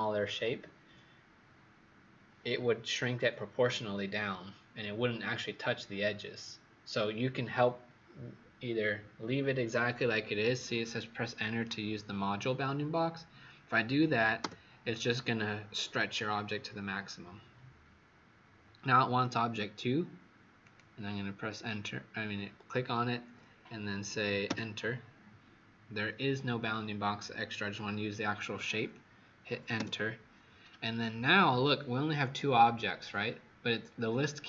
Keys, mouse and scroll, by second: 14.3 Return, 20.6 click, 24.4 Return.